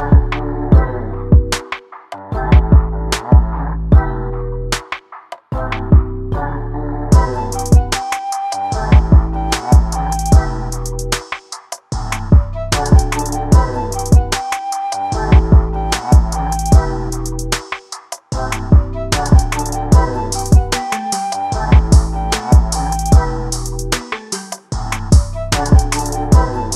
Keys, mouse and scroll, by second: 0.3-1.4 middle drag, 1.4 click, 2.4-3.4 shift+middle drag, 3.4 click, 8.2 s, 10.5 g, 12.5 r, 16.1 scroll down 1, 16.4-17.2 middle drag, 17.2 click, 18.4 click, 21.7 click, 23.3 click, 25.1 click, 25.9 click.